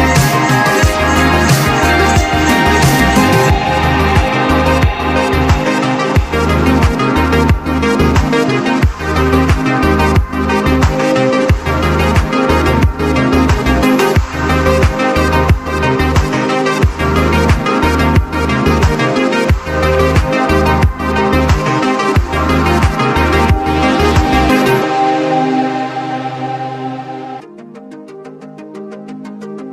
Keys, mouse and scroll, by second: 0.0 right click, 0.7 click, 3.7 click, 4.7 click, 6.2 click, 7.5 ctrl+z, 8.5 click, 8.8 click, 10.0 click, 10.4 click, 11.7 click, 12.5 ctrl+z, 13.4 click, 15.0 click, 16.0 click, 17.2 click, 18.3 click, 19.4 click, 20.0 ctrl+z, 22.1 click, 22.2 click, 25.0 click, 26.0 click, 29.4 click.